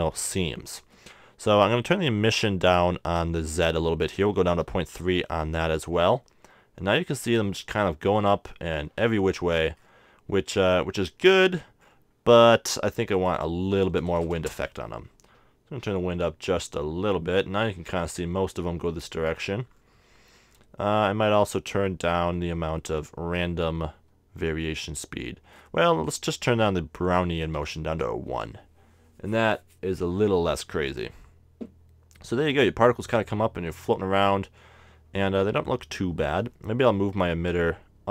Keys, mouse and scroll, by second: 0.1-1.9 drag, 9.7-12.5 middle drag, 13.2-14.8 drag, 14.2 BackSpace, 19.8-22.1 middle drag, 25.6-27.1 middle drag, 27.5-29.1 drag, 37.0 g.